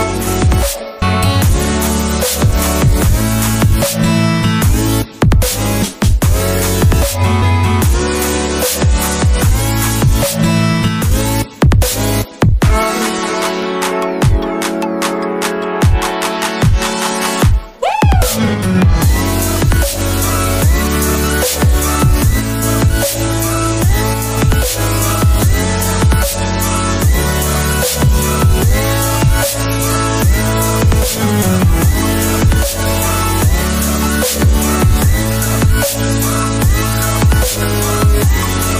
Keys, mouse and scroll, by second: 1.8 alt+Tab, 17.2 middle click, 22.3 alt+Tab, 22.8 middle click, 24.1 ctrl+z, 26.1 ctrl+z, 26.1 middle click, 31.8 alt+Tab, 33.1 double click, 34.5 Return, 35.4 alt+Tab.